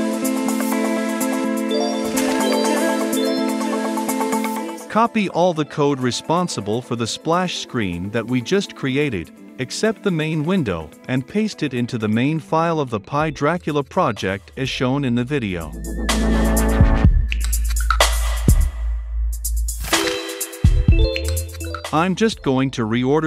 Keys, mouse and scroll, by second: 4.3-18.0 drag, 4.4 c, 18.0 Return, 19.9 v, 23.0 click.